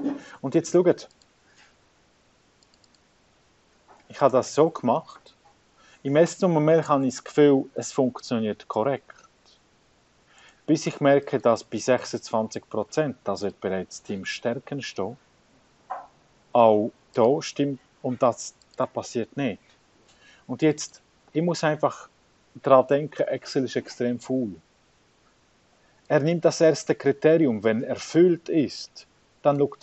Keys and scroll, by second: 1.0 5, 2.8 ,, 4.6 2, 6.4-9.8 typing, 10.8-15.8 typing, 17.4 2, 19.1 ,, 21.1-24.4 typing, 26.4 BackSpace, 28.0-29.8 typing.